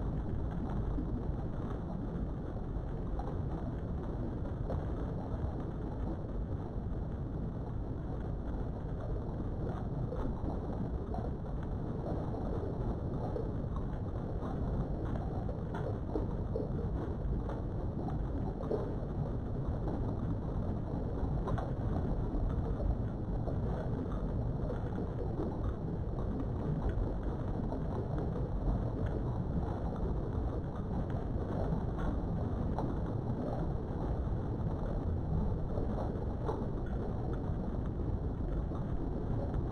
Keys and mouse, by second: 0.6 g, 0.9 z, 1.9 click, 3.0 shift+middle click, 4.4 3, 4.7 middle click, 7.5 KP_3, 9.3 e, 10.6 click, 11.7 s, 12.1 x, 13.3 right click, 13.9-14.5 typing, 15.1 KP_Enter, 16.1-17.8 middle drag, 17.8 middle click, 18.8 KP_3, 23.0 1, 23.8 click, 24.3 g, 25.0 click, 25.3 click, 25.7 g, 26.6 click, 27.4 click, 27.7 g, 28.5 click, 31.4 3, 32.5 click, 33.0 middle click, 35.0 shift+click, 35.8 shift+click, 36.5 middle click, 38.2 click, 39.0 click, 39.6 KP_3.